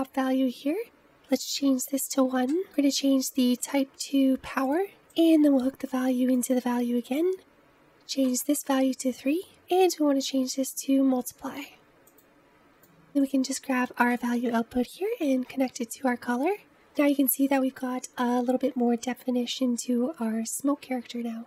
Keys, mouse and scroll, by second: 1.4-2.6 drag, 3.0-4.9 drag, 7.6 click, 9.7-12.6 drag, 13.3 click.